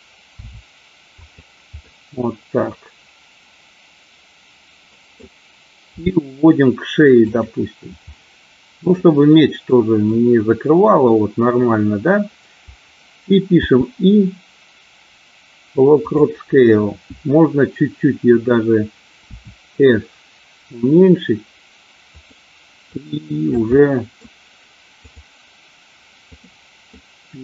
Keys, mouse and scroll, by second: 0.5 r, 1.2 click, 1.8-5.2 middle drag, 5.8 g, 7.2 click, 8.0 middle click, 9.5 scroll up 1, 9.8 middle click, 13.4 i, 19.2 s, 22.1 click, 22.9-23.6 drag, 23.7-24.2 middle drag, 24.9 click, 26.2 click, 26.9 middle click.